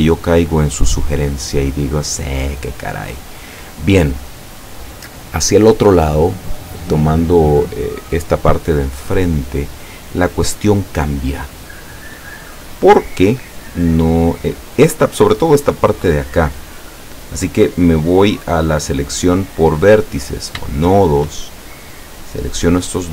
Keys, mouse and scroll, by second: 0.2-3.2 middle drag, 11.8-13.6 middle drag, 17.0-17.5 scroll up 1, 19.1 click, 20.4 shift+right click, 20.9 shift+right click.